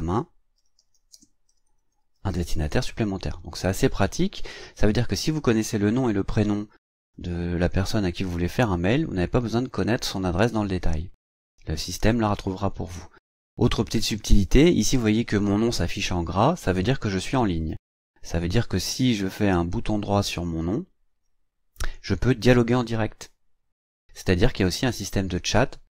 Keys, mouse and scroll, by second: 0.0-2.9 typing, 19.8 right click.